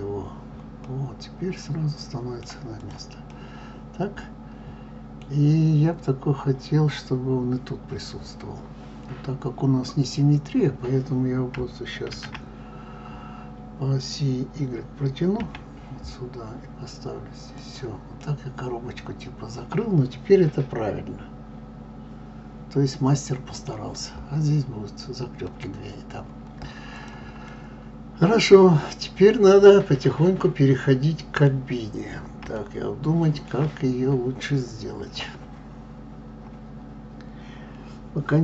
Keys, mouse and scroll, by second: 0.8-2.7 middle drag, 2.7 click, 3.3-6.1 middle drag, 6.1-10.0 scroll down 3, 12.1 shift+d, 18.2-21.7 middle drag, 24.0 scroll up 2, 26.8 click, 27.5-30.7 middle drag, 31.6-32.6 scroll down 2, 32.6-33.7 shift+middle drag, 33.7-34.6 scroll up 2, 34.6-36.7 scroll down 1, 36.7-38.4 scroll down 1.